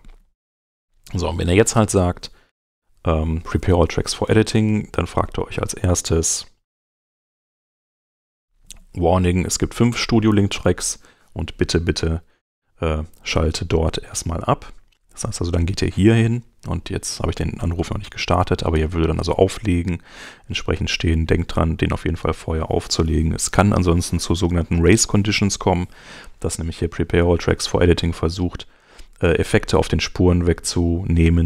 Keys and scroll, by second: 12.4 super+Tab, 21.9 super+Tab.